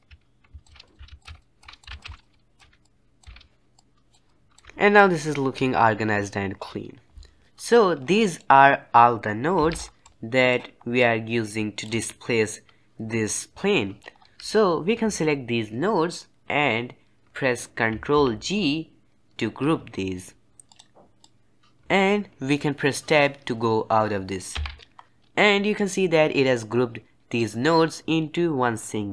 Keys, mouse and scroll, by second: 0.6 alt+a, 0.8 click, 0.9 g, 1.2 alt+a, 1.4 click, 1.6 alt+a, 1.7 click, 1.8 g, 2.0 alt+a, 2.1 middle click, 2.2 c, 2.2 click, 2.6 alt+a, 2.8 click, 3.2 alt+a, 3.7 click, 4.6 alt+a, 7.7-8.1 scroll up 4, 8.1-9.5 middle drag, 9.5 c, 14.0-14.6 scroll down 2, 16.0-18.1 middle drag, 18.1 ctrl+g, 20.4 click, 20.6 click, 21.1-21.8 drag, 24.5 Tab, 27.3-29.1 drag.